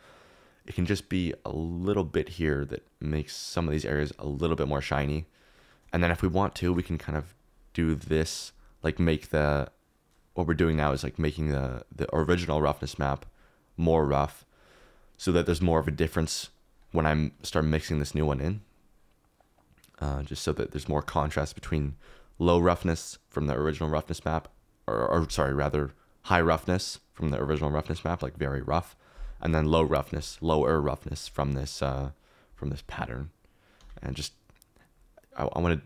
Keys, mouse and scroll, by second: 4.1 click, 6.6 shift+d, 12.5 click, 13.1-14.2 drag, 16.5 click, 18.1 click, 18.8 click, 30.2 click.